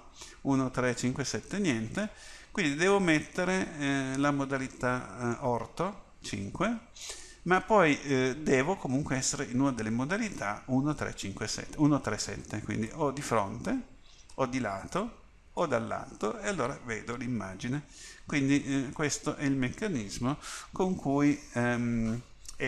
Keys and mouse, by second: 1.1 KP_7, 4.8-6.3 middle drag, 6.3 KP_5, 12.9 KP_1, 14.4 KP_3, 15.6 KP_7, 19.1-22.6 middle drag.